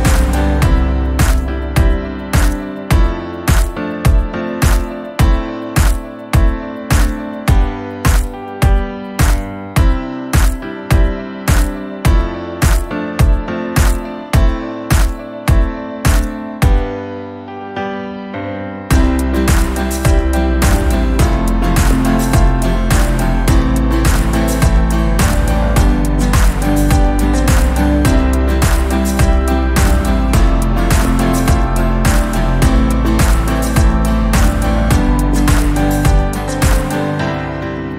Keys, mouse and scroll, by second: 1.7 scroll down 2, 1.9 middle click, 2.4 scroll up 1, 2.5 scroll down 3, 2.8-6.1 middle drag, 6.1-9.8 drag, 9.8-10.2 scroll up 4, 10.2 scroll down 2, 10.4 scroll up 2, 10.7 scroll down 1, 10.9 shift+middle click, 11.2 scroll up 1, 12.0-13.2 drag, 14.6-15.7 middle drag, 15.7-18.4 drag, 18.4 middle click, 19.2-20.4 drag, 20.8 scroll down 2, 21.0 middle click, 21.6-22.0 scroll up 1, 22.2-24.3 shift+middle drag, 24.3 scroll down 10, 27.5-32.0 drag, 32.1 scroll up 1, 32.9-34.2 drag, 35.5-36.8 drag, 36.8 middle click, 37.6 click.